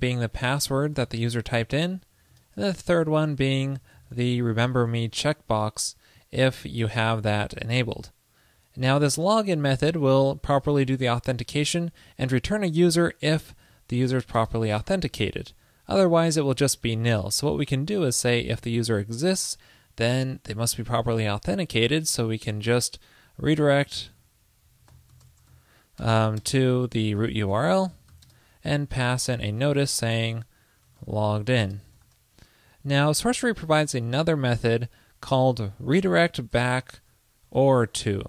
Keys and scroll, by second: 2.7 ctrl+p, 6.7 super+Left, 16.1 super+Return, 30.3 ctrl+l, 33.3 super+Left, 33.5 alt+Right.